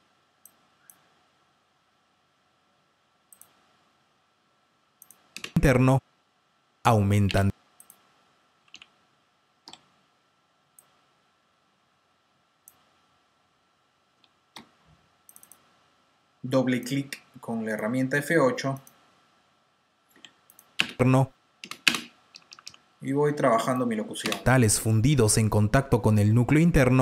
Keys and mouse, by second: 0.3 click, 3.2 click, 7.5 space, 7.7 click, 8.5 space, 8.5 t, 8.7 t, 9.6 F6, 10.6 click, 14.1 F7, 14.4 F8, 15.2 click, 15.4 double click, 17.4 F7, 17.4 F8, 20.1 F7, 20.4 click, 20.7 space, 21.8-22.6 typing, 23.6 click, 24.2 space.